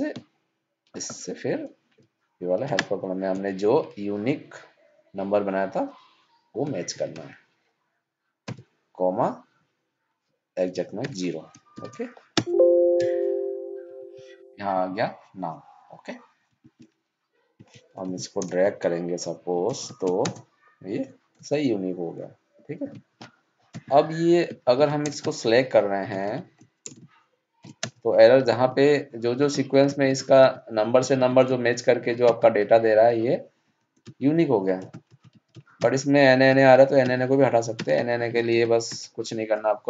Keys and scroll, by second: 2.6 ctrl+shift+Down, 17.9 ctrl+c, 22.7 ctrl+z, 24.6 ctrl+c, 37.3 ctrl+Up.